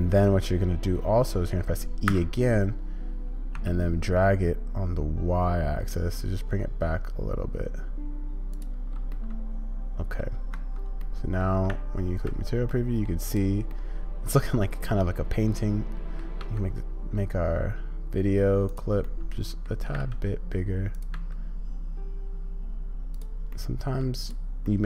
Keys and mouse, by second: 9.1-10.2 middle drag, 10.5 Tab, 11.0 middle click, 11.7 z, 12.7 click, 13.7-16.2 drag, 19.0-19.7 drag, 23.5-24.0 drag, 24.2 click, 24.6-24.8 middle drag.